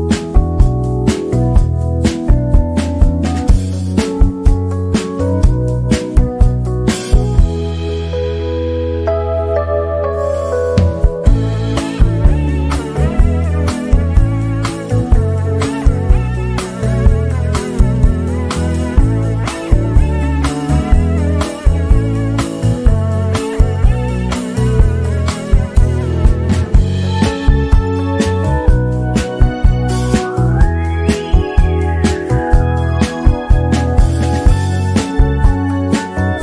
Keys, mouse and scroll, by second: 2.2-3.7 shift+drag, 3.7-4.4 shift+scroll down 1, 4.7 click, 6.4-6.8 shift+scroll down 1, 7.6 z, 8.0 click, 9.2 F7, 9.9-12.1 drag, 13.0 shift+click, 17.5 click, 18.1-18.4 ctrl+scroll down 1, 18.7 shift+scroll down 1, 19.8 click, 20.8 ctrl+z, 22.0 Escape, 22.3 click, 26.9 shift+scroll down 1, 27.6 click, 27.8 z, 28.0-33.1 drag, 33.1 shift+scroll down 1, 33.6 z, 33.9-35.5 drag, 35.5 F7, 36.3-36.4 drag.